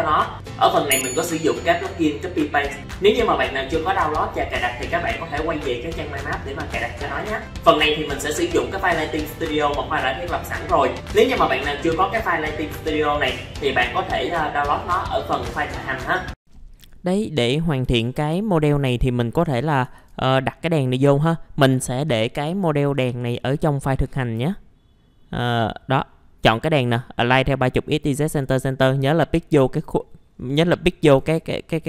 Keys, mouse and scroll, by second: 16.4 ctrl+r, 17.4 click, 18.0 F4, 18.4-18.8 scroll up 1, 18.8 middle click, 20.1 alt+a, 24.2 click, 30.3-30.9 scroll up 1, 31.3 F4.